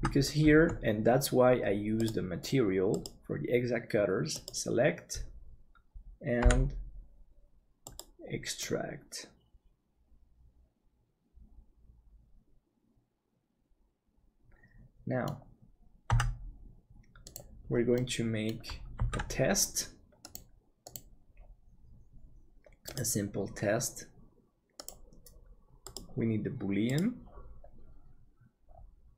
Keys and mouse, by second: 2.9-6.4 drag, 6.4 p, 8.6-16.2 middle drag, 16.1 Tab, 17.9 middle click, 19.2 ctrl+s.